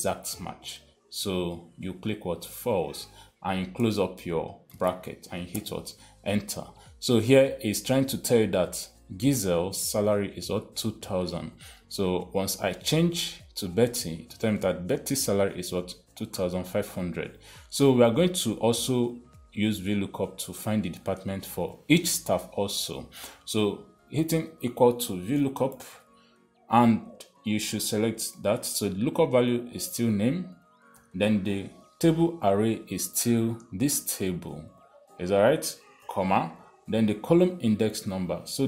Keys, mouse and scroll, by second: 2.9 click, 3.1 click, 5.0 shift+0, 5.9 Return, 11.8 click, 12.8 click, 13.8 click, 21.0 click, 24.4 =, 25.5-26.8 typing, 27.8 click, 28.1 click, 30.0 click, 31.4 ,, 33.9 click, 33.9 ,, 36.5 ,.